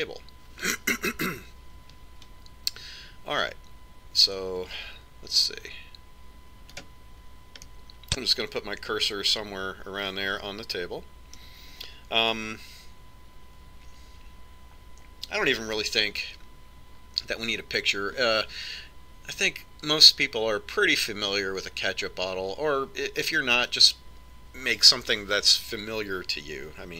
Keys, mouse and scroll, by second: 8.1 click, 8.9-10.9 middle drag.